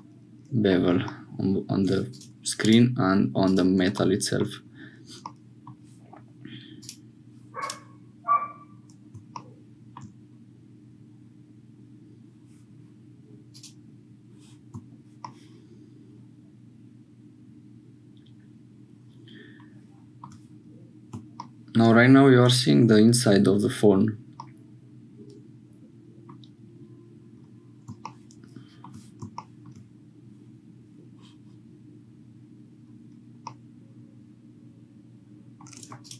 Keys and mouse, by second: 0.0 click, 2.1 click, 2.6 click, 3.4 click, 4.1 shift+middle click, 5.3 middle click, 6.8 click, 13.5 click, 15.2-20.3 shift+middle drag, 24.4-26.3 middle drag, 29.3 shift+click, 33.6-35.7 middle drag, 36.0-36.1 drag.